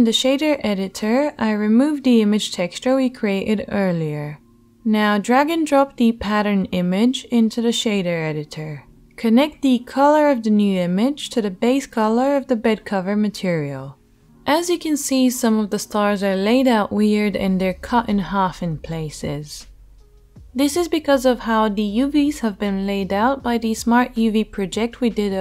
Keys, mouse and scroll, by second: 0.0 click, 0.0 right click, 1.1-5.9 drag, 2.5 Delete, 5.9-25.4 middle drag.